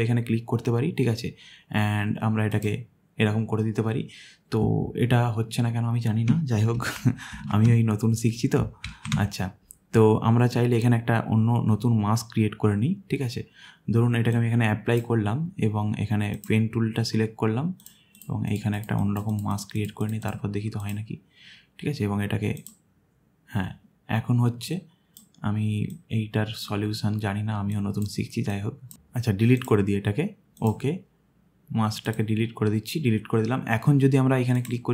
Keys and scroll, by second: 6.8 ctrl+z, 7.3 ctrl+z, 8.9 ctrl+z.